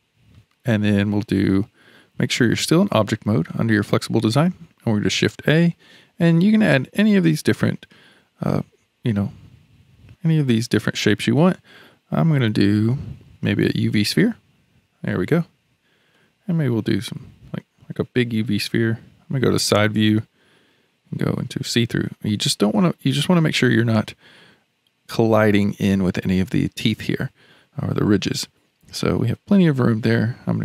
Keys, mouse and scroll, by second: 3.5 click, 5.0 shift+a, 16.1-19.3 middle drag, 19.3 KP_3, 21.2 alt+z, 21.7-22.5 scroll up 3.